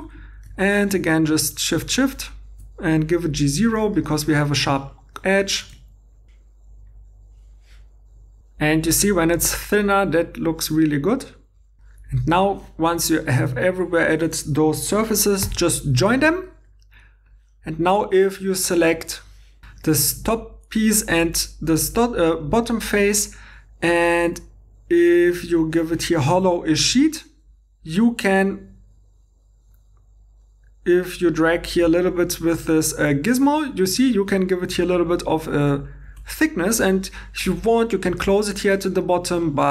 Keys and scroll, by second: 7.4 shift+e, 12.2 Tab, 15.5 i.